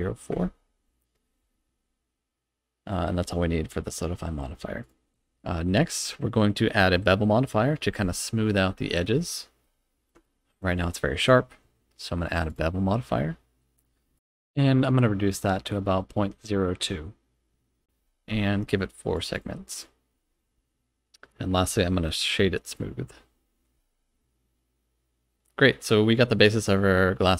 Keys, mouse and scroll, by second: 4.8 click, 9.1 scroll up 2, 9.6-10.1 middle drag, 10.2 shift+middle click, 11.2-12.5 drag, 14.2-18.0 drag, 19.1 click, 19.3 click, 19.7 click, 21.6-22.7 right drag, 24.0-25.6 scroll up 2, 25.9-27.3 middle drag.